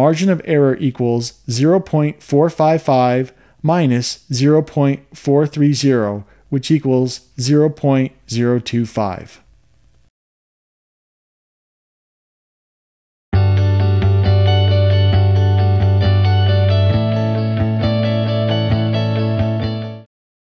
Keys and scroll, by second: 1.5-4.5 typing, 5.6-8.2 typing, 9.0 Return.